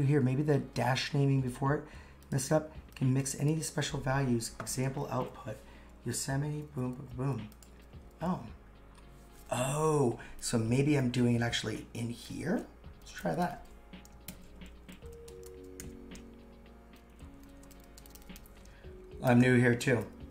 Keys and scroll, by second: 11.8-12.7 typing, 14.3 shift+], 14.9 shift+3, 17.1 shift+3, 17.4 shift+[, 19.2 shift+].